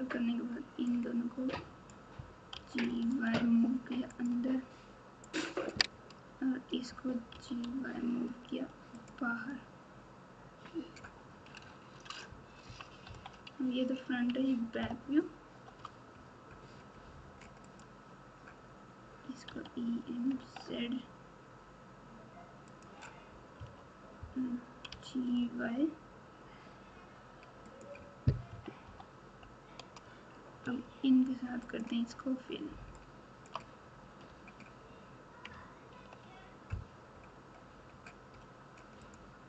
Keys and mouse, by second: 1.0 click, 2.5 g, 5.3 click, 7.3 g, 12.6 KP_1, 13.0 KP_9, 14.8 ctrl+KP_8, 15.3 ctrl+KP_8, 17.6 click, 19.5 e, 23.5 KP_3, 24.9 g, 28.4 KP_1, 28.8 KP_9, 33.0 shift+click, 34.3 f, 35.9 ctrl+z, 39.0 click.